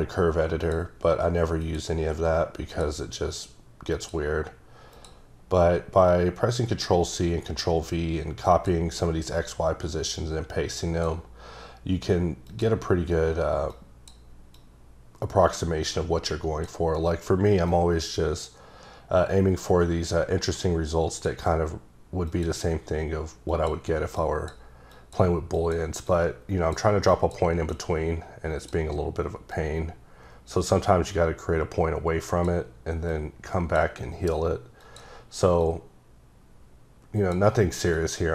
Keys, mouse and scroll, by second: 0.6 click, 1.6 click, 2.7 click, 3.9 click, 4.9 click, 6.1 click, 7.6 click, 10.4 click, 12.4 click, 14.0 click, 14.8-16.7 drag, 17.7 click, 22.2 click, 23.5 click, 24.1 click, 24.9 click, 25.5 click, 26.1 click, 27.1 click, 27.7 click, 29.5 click, 33.1 click, 34.8 click, 35.6 click, 37.9 click.